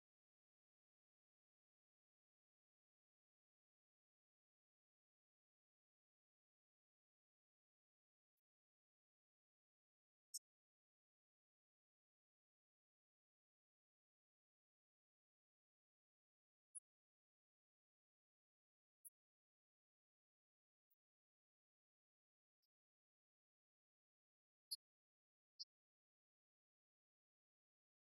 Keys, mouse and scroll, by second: 1.8 click, 12.0-17.2 drag, 25.0 click.